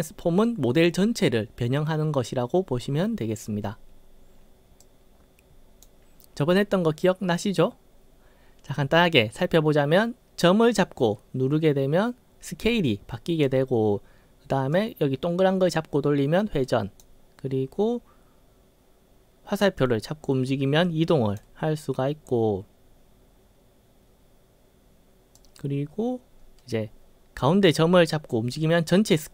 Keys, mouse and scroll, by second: 3.0-3.7 scroll up 5, 4.9-5.9 drag, 10.5-13.5 drag, 14.8-17.0 drag, 19.8-21.4 drag, 25.4-29.3 drag.